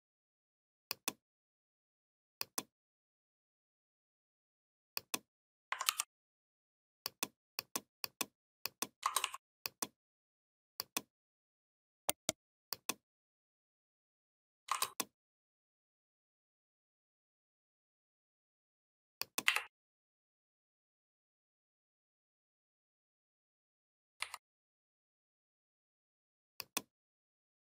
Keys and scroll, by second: 5.6 ctrl+g, 19.2 Up, 24.0 Down.